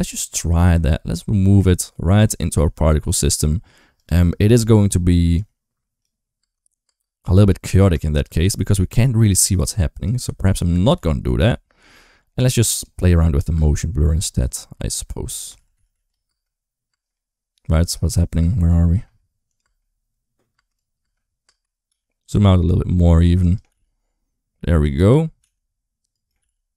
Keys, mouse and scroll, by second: 0.4 g, 2.3 g, 5.2 click, 6.2-8.6 typing, 10.2 ctrl+z, 10.4 ctrl+z, 10.8 ctrl+z, 11.3 ctrl+z, 12.8 space, 13.4 space, 14.2 ctrl+z, 15.4 ctrl+shift+z, 15.6 ctrl+shift+z, 15.7 ctrl+shift+z, 16.1 space, 16.7 space, 18.2-21.7 typing, 19.3 click, 20.6 click, 23.5 g, 25.2 g, 26.2 g.